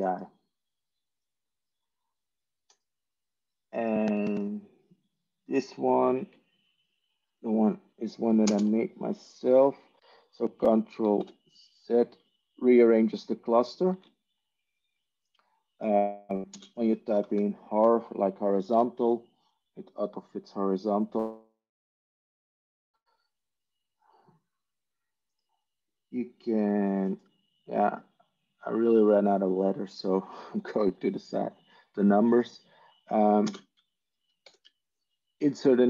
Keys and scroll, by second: 8.3 ctrl+space, 11.1 ctrl+z, 13.8 ctrl+z, 19.0-19.8 typing, 21.0 ctrl+z, 33.4 ctrl+space, 34.3 ctrl+1.